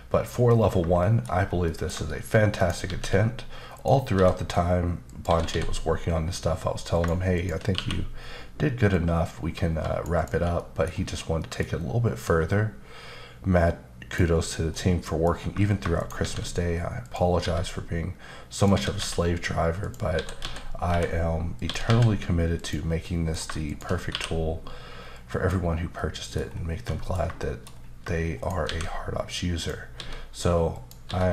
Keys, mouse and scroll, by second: 0.5 scroll down 2, 1.0 shift+middle click, 1.4 scroll down 1, 1.6 middle click, 2.6 shift+right click, 2.8 shift+a, 3.7 click, 4.1 s, 5.0 click, 5.3 typing, 6.9 click, 7.3 shift+click, 7.7 q, 8.9 click, 10.1 double click, 10.9-11.4 scroll up 2, 11.4 middle click, 12.5 click, 14.7 middle click, 16.0 right click, 16.2 shift+a, 17.0 click, 17.4 s, 18.5 click, 18.7 typing, 19.8 click, 20.1-21.8 typing, 21.6 click, 22.5 click, 23.0 middle click, 23.7 shift+click, 24.1 q, 25.1 click, 25.9 middle click, 26.5-26.9 scroll down 2, 26.9 middle click, 27.4 shift+middle click, 27.7 scroll down 2, 28.4 shift+right click, 28.6 shift+a, 29.5 click, 29.9 s, 30.7 click, 31.0-31.3 typing.